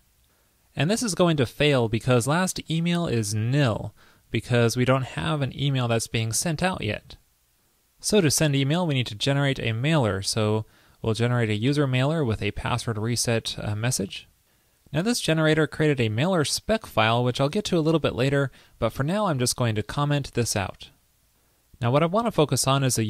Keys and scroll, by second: 9.8 super+v, 18.9 super+a, 19.7 super+/, 20.6 super+s.